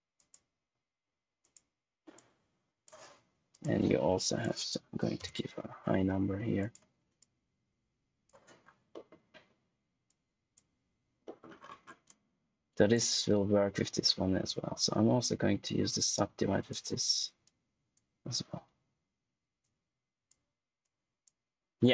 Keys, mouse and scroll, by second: 2.4 click, 5.1 Return, 6.5 click, 7.4 click, 8.5-8.8 scroll down 1, 8.8 middle click, 9.3-9.9 scroll up 1, 10.0 click, 11.2 middle click, 11.5-12.0 scroll up 1, 12.0 click, 14.2 click, 15.9 click, 17.7 click, 19.8 click, 21.1 click, 21.8-21.9 scroll down 1.